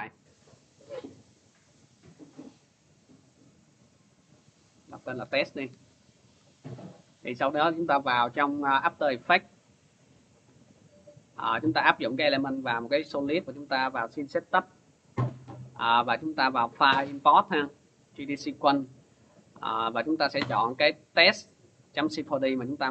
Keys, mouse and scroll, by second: 2.3 click, 3.1 click, 4.5 click, 4.8-6.0 typing, 8.1 click, 8.9-10.2 typing, 9.7 click, 12.3 click, 16.0 click, 17.7 click, 19.6 click, 20.4 click, 22.2 click.